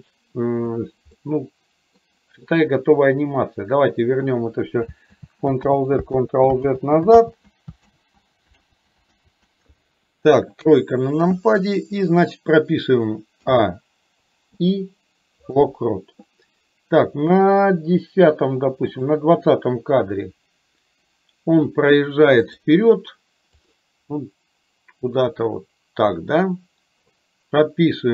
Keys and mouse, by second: 1.3 middle click, 5.1 ctrl+z, 5.8 ctrl+z, 6.4 ctrl+z, 6.9 ctrl+z, 7.3 ctrl+z, 8.0 ctrl+z, 8.8 ctrl+z, 9.3 ctrl+z, 10.6 KP_3, 13.6 a, 18.9 click, 22.5 click, 23.6 click, 25.5-27.1 drag.